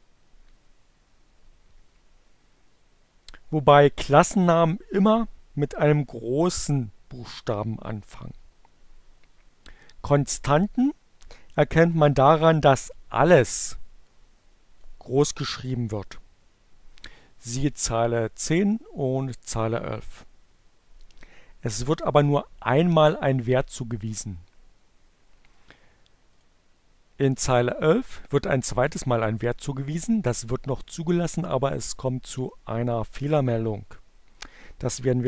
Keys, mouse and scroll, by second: 12.6-14.7 drag, 22.4 click, 25.6 click.